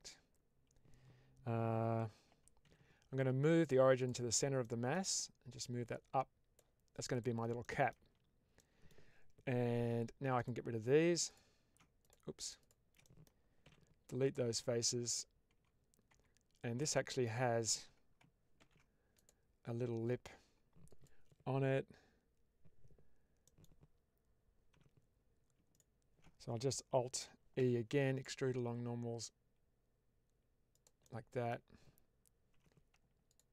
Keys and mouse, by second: 2.5 ctrl+alt+x, 4.5-4.9 middle drag, 5.5-7.0 drag, 7.5 middle click, 8.0 Tab, 8.5 middle click, 10.2 click, 11.1 ctrl+alt+click, 11.9 click, 12.5 ctrl+shift+click, 12.9 middle click, 13.5 x, 14.5 middle click, 15.4 Tab, 16.0 Tab, 16.8 middle click, 18.5 ctrl+r, 20.8 click, 23.3 middle click, 24.6 3, 27.5 alt+b, 30.6 click, 30.9 middle click, 33.1 alt+click.